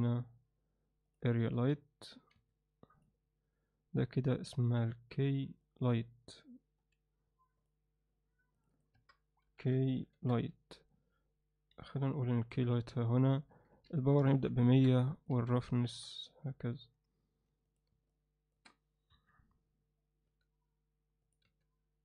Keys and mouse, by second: 1.5 s, 3.0 click, 5.7 click, 6.8 m, 8.7-10.9 drag, 11.7 g, 13.4-14.8 drag, 14.3 0, 15.2 click, 17.7 drag, 19.1 KP_1, 20.3 g, 21.4 r.